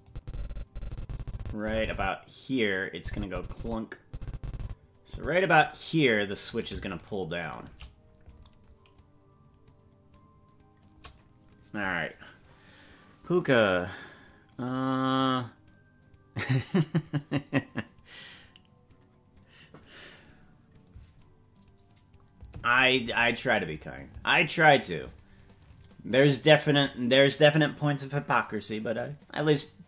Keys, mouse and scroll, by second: 0.1-5.7 drag, 6.6-11.5 right drag.